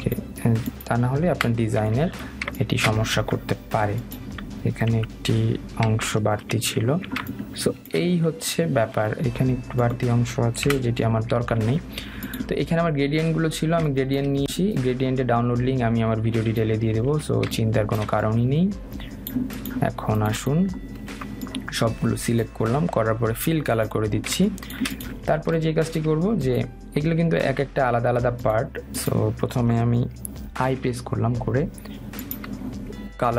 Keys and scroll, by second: 6.2 Delete, 11.8 Delete.